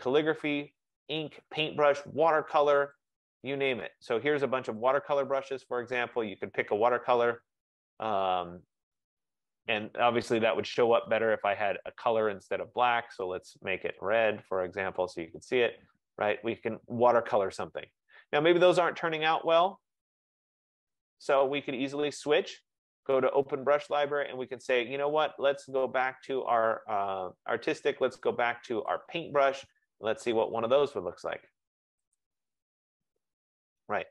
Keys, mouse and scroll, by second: 3.2 click, 5.5 click, 6.4 click, 8.9 click, 12.1 click, 12.3 click, 14.3 click, 15.1 click, 17.4 middle click, 17.4 middle click, 17.6 middle click, 17.7 middle click, 17.9 middle click, 18.4 middle click, 18.6 middle click, 18.8-19.5 scroll, 20.2 click, 22.0 click, 29.0 click, 30.7 click, 32.3 click, 33.6 click.